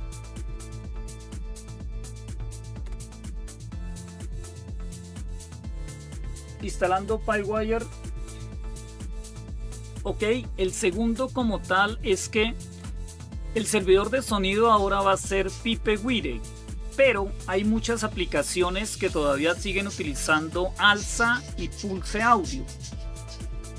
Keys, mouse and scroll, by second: 0.0-0.9 typing, 2.6-5.3 typing.